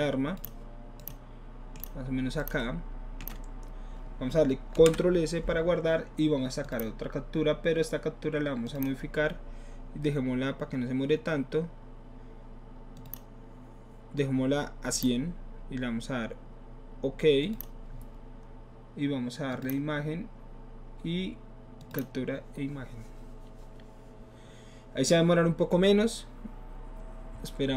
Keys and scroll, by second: 4.8 ctrl+s.